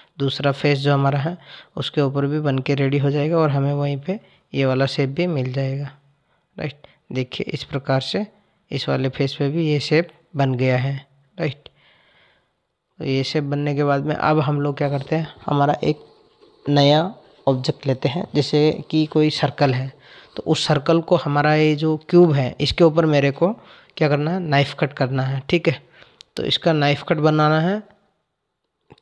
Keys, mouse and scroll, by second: 3.8 click, 9.3 click.